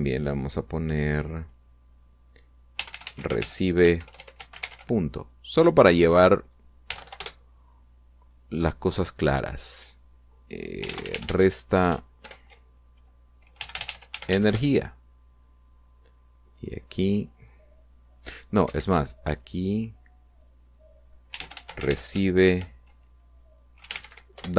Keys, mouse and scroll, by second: 3.5-5.4 typing, 6.6 BackSpace, 7.6 n, 7.7 End, 7.9 Return, 10.0 click, 11.5-13.0 typing, 14.3-15.0 typing, 15.2 Return, 17.6 click, 19.4 Escape, 21.0 click, 22.0-22.6 typing, 24.5 d.